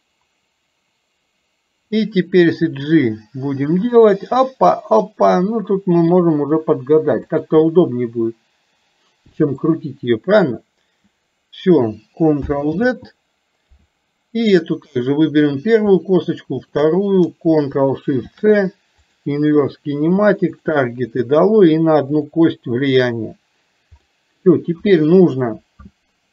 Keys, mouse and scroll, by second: 0.0 click, 7.7-9.7 middle drag, 12.8 ctrl+z, 14.8 click, 18.3 ctrl+shift+c, 20.7 click, 22.3 click, 24.2 middle click.